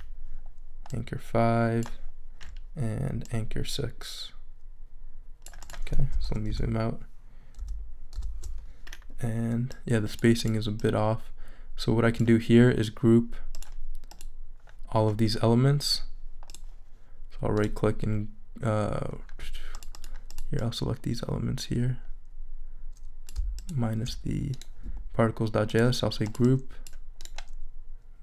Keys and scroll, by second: 6.3 super+-.